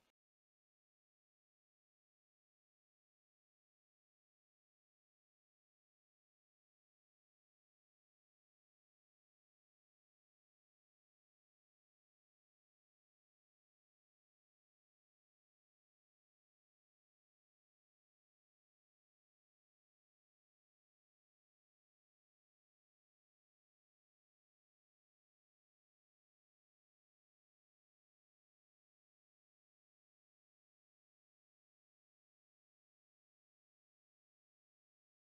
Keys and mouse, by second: 0.2 shift+click, 0.5 ctrl+p, 1.3 shift+click, 1.6 ctrl+p, 2.1 click, 2.8 click, 3.1 click, 3.6 click, 3.9-6.8 typing, 4.3 click, 4.9 click, 7.2 click, 7.6 click, 7.8 click, 9.0 click, 9.2 click, 10.1 click, 10.4 g, 10.7 click, 11.0 click, 11.5 click, 11.9 r, 12.4 click, 12.7 r, 13.7 middle click, 14.3 click, 14.5 click, 14.9 middle click, 15.2 KP_3, 15.6 click, 16.4 click, 16.7 click, 18.5 KP_1, 18.8 r, 19.5 middle click, 20.0 click, 20.1 middle click, 20.5-24.1 typing, 20.8 middle click, 21.5 middle click, 21.7 click, 22.3 middle click, 23.1 middle click, 23.5 middle click, 23.8 click, 24.6-24.9 middle drag, 25.3 click, 26.2 r, 26.8 middle click, 27.1 middle click, 27.4 click, 27.8 middle click, 28.1 r, 28.7 click, 28.9 middle click, 29.2 middle click, 29.5 click, 29.7 middle click, 30.0 r, 30.3 middle click, 30.6 middle click, 30.8 click, 31.0 g, 31.4 drag, 31.7 click, 32.1 click, 32.1 middle click, 32.5 r, 33.0 middle click, 33.3 middle click, 33.7 click, 33.9 g, 34.1 drag, 34.2 middle drag, 34.5 middle click, 34.7 middle drag.